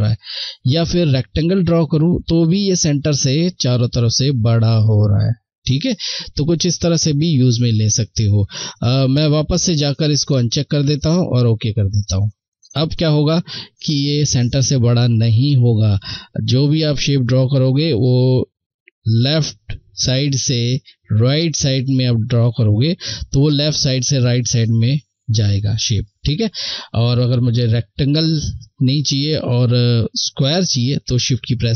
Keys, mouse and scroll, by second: 7.2 shift+Delete, 8.3 shift+Left.